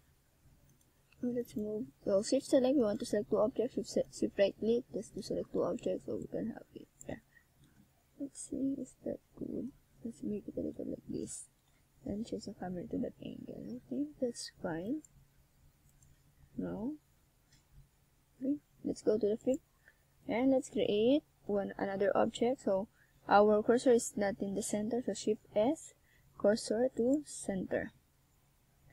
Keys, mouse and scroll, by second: 0.1 click, 0.2 click, 0.4 click, 0.9 click, 1.0 click, 1.2 click, 1.3 click, 1.8 click, 2.0 click, 2.2 click, 2.4 click, 2.6 click, 2.8 click, 3.1 click, 3.3 click, 3.4 click, 3.6 click, 3.8 click, 4.3 click, 5.8 middle click, 9.2 KP_1, 13.6 click, 14.9 click, 17.6 click, 19.8 middle click, 20.6 scroll up 2, 21.3 middle click, 22.1 scroll down 2, 22.5 middle click, 24.6 Tab, 25.0 right click, 26.6 Tab, 27.5 middle click.